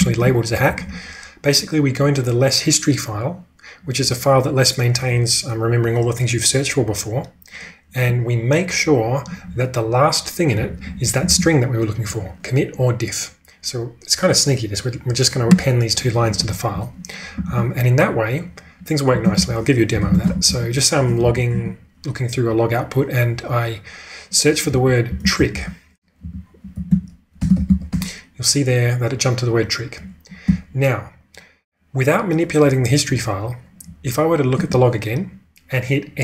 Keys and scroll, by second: 0.0 ctrl+[, 0.6 j, 0.8 j, 10.5-11.7 typing, 16.2 typing, 17.4 ctrl+[, 19.3-21.7 typing, 23.3-28.4 typing, 30.4 q, 33.8 Up, 34.6 Return.